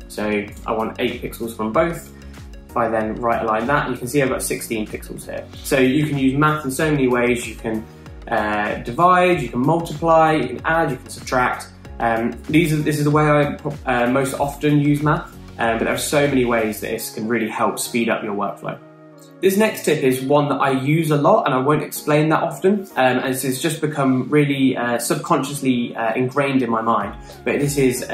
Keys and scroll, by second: 1.0 Return.